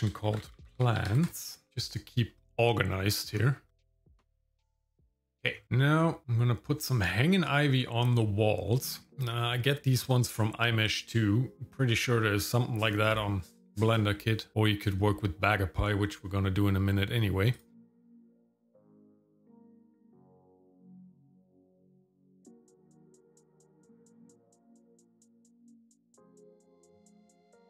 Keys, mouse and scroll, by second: 3.3-3.8 scroll up 2, 4.2 click, 4.4 m, 5.0 scroll down 2, 5.1 shift+middle click, 5.2 scroll up 1, 5.3 shift+middle click, 5.6 middle click, 6.2 shift+middle click, 6.2-6.8 scroll down 1, 9.1 click, 11.0-16.0 drag, 17.5 click, 18.6 click, 19.0 shift+right click, 19.3 click, 19.5 shift+middle click, 19.5 scroll up 1, 20.1 shift+z, 20.3 g, 20.8 shift+z, 21.0 shift+middle click, 21.3 shift+middle click, 21.5 s, 21.8 shift+middle click, 22.2 shift+click, 22.7 shift+right click, 22.9 click, 23.1 shift+middle click, 23.3 r, 23.6 g, 24.2 shift+middle click, 24.6 shift+middle click, 24.9-27.3 typing, 25.3 shift+middle click, 25.4 scroll down 2, 25.5 shift+middle click, 26.2 shift+middle click, 26.7 shift+middle click, 26.8 ctrl+click, 26.9 shift+middle click, 27.0 scroll up 2, 27.1 middle click, 27.5 click, 27.6 scroll down 2.